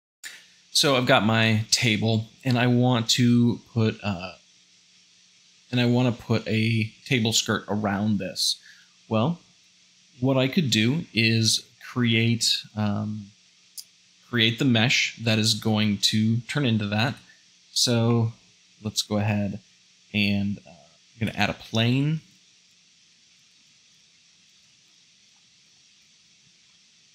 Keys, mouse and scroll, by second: 17.0 `, 18.1 shift+middle click, 18.7 shift+a, 21.2-24.9 typing, 23.7 click, 26.4 shift+middle click.